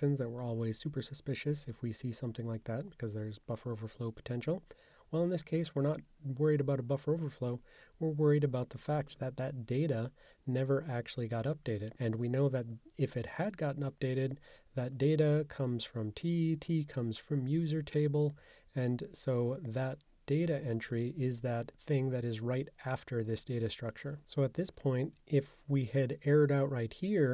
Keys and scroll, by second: 24.7 super+[.